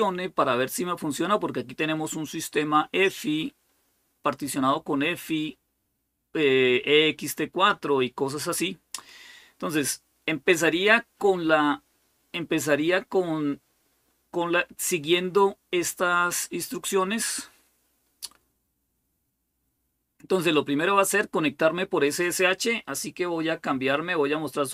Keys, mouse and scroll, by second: 4.9-6.8 scroll down 4, 6.8-8.5 scroll down 1, 8.5-9.7 scroll down 1, 10.1 scroll up 2, 11.9-12.5 scroll up 2, 13.7-18.2 scroll up 3, 18.2-20.9 scroll down 1.